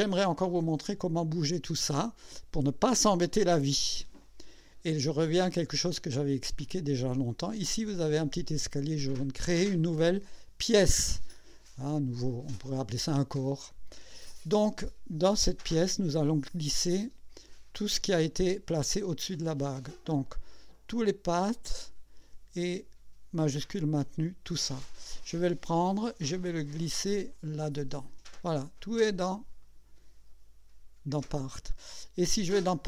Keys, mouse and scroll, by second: 0.0 click, 13.7 click, 20.7 click, 24.0 shift+click, 26.0-27.8 drag, 29.6 click, 32.6 click.